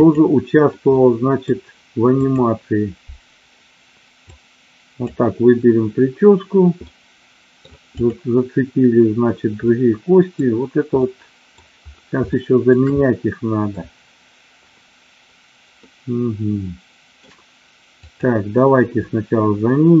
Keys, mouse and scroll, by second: 0.0 click, 1.0 middle click, 4.3-5.0 drag, 6.8-7.7 middle drag, 7.9 click, 9.7-10.4 middle drag, 10.9-11.5 middle drag, 12.3-12.7 shift+middle drag, 12.9-13.8 middle drag, 15.8-17.1 middle drag, 17.9 click.